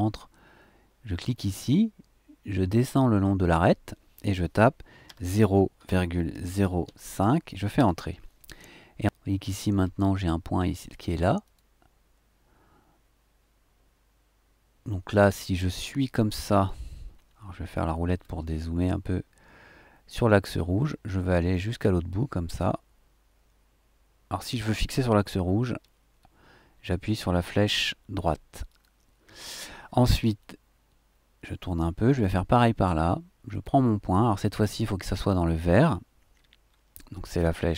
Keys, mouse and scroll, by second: 1.2 click, 5.0 KP_0, 5.7 ,, 6.3 KP_0, 6.8 KP_5, 7.7 KP_Enter, 9.4-9.7 scroll up 2, 9.7-11.4 scroll down 2, 11.4 click, 17.7-18.0 scroll down 2, 18.0 scroll up 2, 18.1 scroll down 2, 18.2-20.9 scroll up 4, 20.9-23.3 middle drag, 25.8 Right, 28.6 click, 30.4 click, 31.0-32.3 right drag, 33.5 click, 36.4 BackSpace.